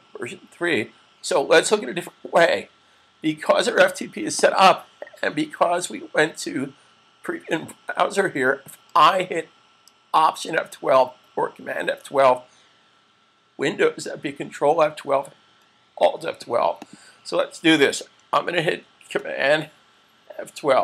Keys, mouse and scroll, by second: 1.2 click, 4.3 click, 16.6 click.